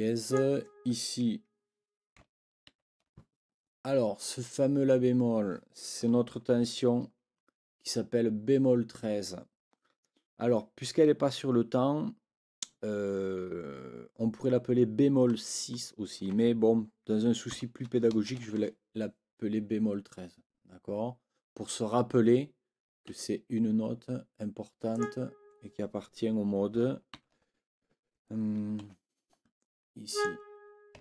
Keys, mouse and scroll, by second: 0.2 click, 2.7 ctrl+l, 17.5 b, 23.1 Escape, 24.9 click, 27.1 ctrl+b, 28.8 ctrl+z, 30.1 click.